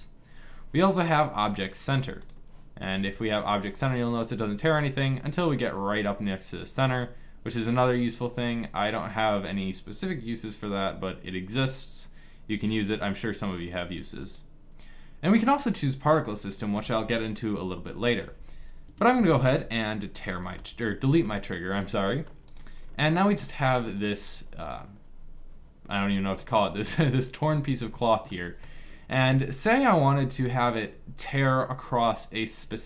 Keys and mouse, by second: 1.9-4.5 drag, 2.5 g, 14.2-15.8 drag, 18.5 KP_5, 19.8 Delete, 23.9-25.8 middle drag, 26.0 middle click, 27.5-28.9 middle drag, 30.7-32.7 middle drag.